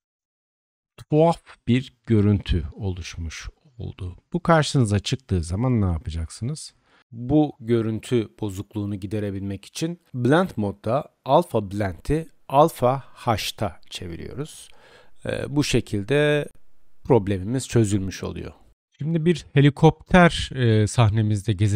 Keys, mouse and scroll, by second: 7.7-16.0 middle drag, 7.7-13.0 right drag, 14.8 Tab, 16.0-21.7 drag, 17.3 2, 18.7 Tab.